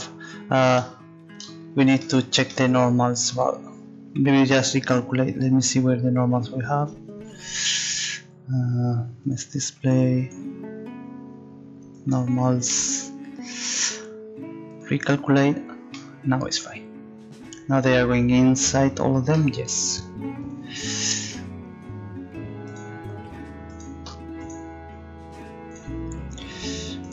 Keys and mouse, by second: 0.9 middle click, 5.3 middle click, 11.5-12.7 drag, 12.8 middle click, 13.5 click, 16.0 right click, 16.1 middle click, 17.3 middle click, 20.3 middle click.